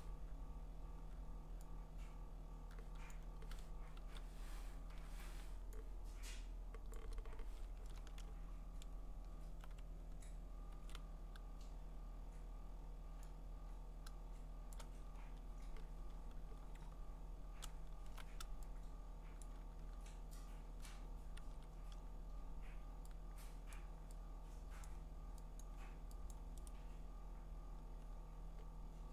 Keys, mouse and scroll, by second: 2.5 click, 3.1 click, 4.0 ctrl+z, 4.9 0, 6.9 click, 8.1 middle click, 8.3-8.9 scroll, 10.7 ctrl+z, 14.7 click, 15.2 scroll, 15.9-17.0 scroll, 17.4-19.4 scroll, 19.4 click, 20.9 click, 21.4 ctrl+z, 23.7 click, 24.8 click, 25.6 click, 26.3 click, 26.7 right click, 27.7-28.5 scroll.